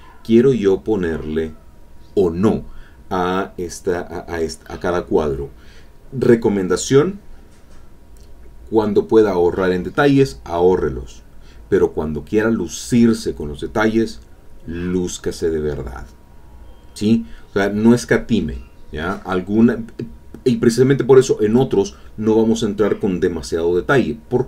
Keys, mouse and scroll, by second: 1.6 click, 9.9 alt+Tab, 13.3 click, 13.6-14.9 drag, 15.3 click, 15.8 alt+Tab.